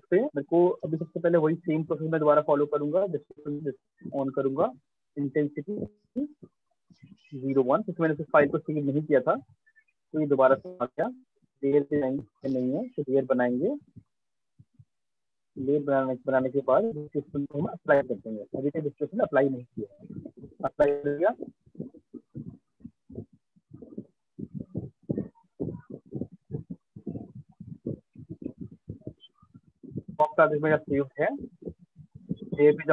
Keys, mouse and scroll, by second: 0.9 click, 2.0 click, 3.6 click, 5.3 alt+click, 6.4 right click, 7.1 alt+click, 7.9 alt+click, 9.3 right click, 10.6 alt+click, 11.1 click, 11.9 click, 16.0 click, 17.2 click, 19.7 click, 22.4 alt+click, 28.3 click, 29.1 click, 30.2 click, 31.5 click.